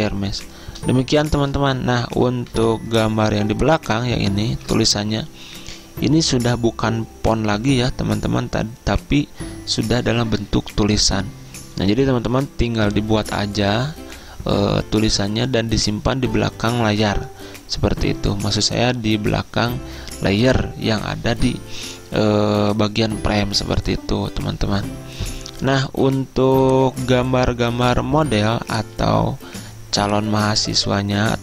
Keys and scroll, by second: 2.6 v, 4.6 ctrl+z.